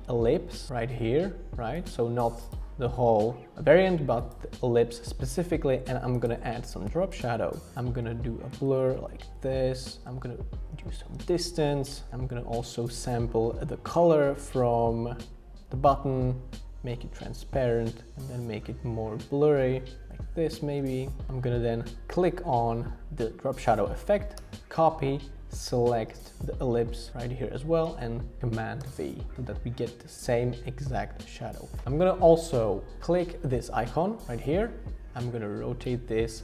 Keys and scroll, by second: 8.5 Up, 8.6 Up, 8.8 Up, 8.9 Up, 9.1 Up, 9.2 Up, 9.3 Up, 10.1 shift+Up, 10.7 shift+Down, 10.9 shift+Up, 11.9 Up, 12.1 shift+Down, 12.5 Up, 13.0 Up, 18.6 shift+Up, 20.1 shift+Up, 20.6 shift+Down, 21.3 Return, 24.4 super+c, 28.8 super+v.